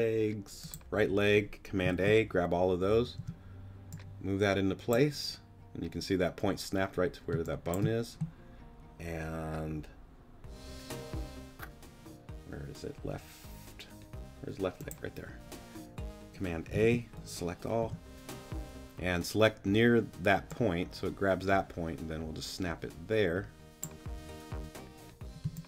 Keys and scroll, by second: 1.9 super+a, 3.2 Up, 7.3 space, 16.8 super+a, 17.8 super+t, 25.4 space.